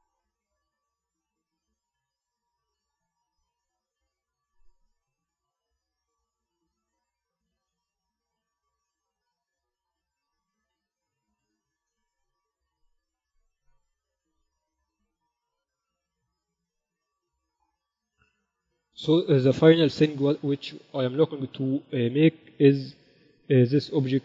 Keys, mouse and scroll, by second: 1.1 ctrl+r, 3.6 a, 4.9 b, 7.5-9.3 drag, 8.3 e, 10.2 z, 10.5 Tab, 11.5 KP_2, 11.8 KP_2, 12.1 z, 12.6 z, 14.0-15.2 drag, 19.0 KP_1, 22.4-24.2 middle drag.